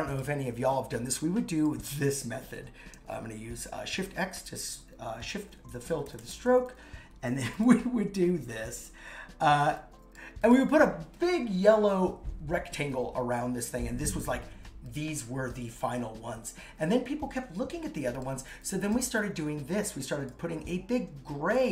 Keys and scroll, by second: 3.9 shift+x, 5.9 shift+Up.